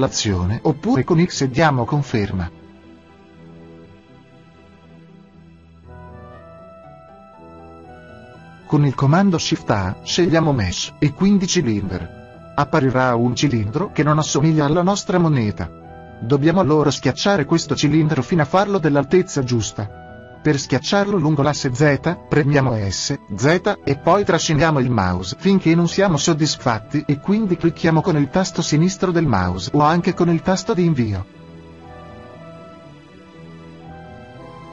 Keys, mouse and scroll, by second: 2.4-4.1 middle drag, 4.1-5.7 right drag, 5.7 x, 11.7 shift+a, 19.2-23.8 middle drag, 29.3 right click, 29.3 s.